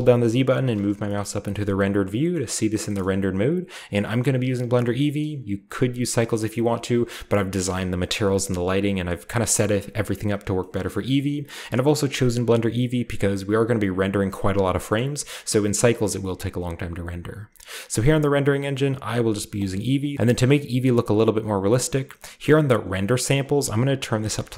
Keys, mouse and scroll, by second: 0.0-6.8 typing, 1.1 shift+middle click, 1.1-2.3 shift+scroll up 1, 2.3 shift+middle click, 2.3-2.7 shift+scroll up 1, 3.0-4.0 shift+middle drag, 4.2-7.4 middle drag, 4.2-4.8 scroll up 1, 4.8-5.6 shift+scroll up 1, 6.6-8.5 shift+scroll up 1, 7.6-10.4 shift+middle drag, 8.5-10.4 shift+scroll down 1, 10.7-11.9 shift+middle drag, 11.8-13.0 drag, 11.9 typing, 13.0-14.8 scroll down 1, 14.8-16.9 shift+middle drag, 18.5 click, 19.5 click, 20.1-20.9 scroll down 1, 23.3 click, 24.2 typing.